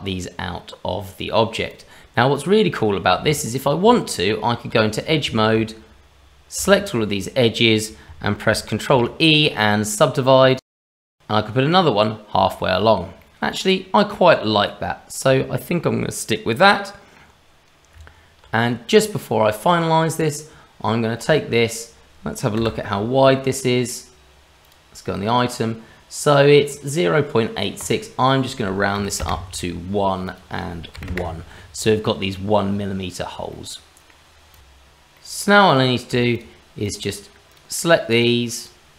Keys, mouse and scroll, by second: 1.7 click, 2.3 click, 3.4-3.8 scroll up 1, 3.8 Tab, 5.0 click, 6.5 a, 8.9 ctrl+e, 10.8 middle click, 12.6 shift+middle click, 13.2 middle click, 17.9 Tab, 18.9 click, 20.2 click, 20.9-21.2 scroll up 2, 21.3 shift+middle click, 22.6 n, 24.6 click, 27.8 click, 30.2 click, 33.6 middle click, 34.5 click, 34.6 ctrl+z, 35.1 middle click, 35.7 click, 36.3 shift+click, 36.8-38.9 shift+click.